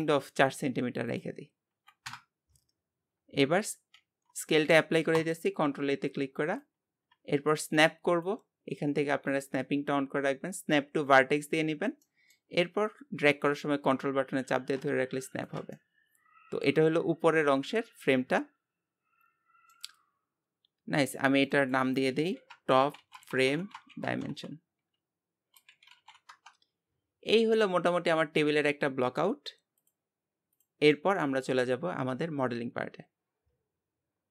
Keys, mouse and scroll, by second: 1.1-3.1 drag, 3.1-4.0 scroll up 1, 4.0 ctrl+a, 6.6-12.0 drag, 12.0 middle click, 12.5 scroll up 2, 13.3-15.8 drag, 15.8-18.9 middle drag, 21.4-27.9 drag, 27.9-29.8 middle drag, 29.8-30.9 drag, 30.9-34.1 middle drag.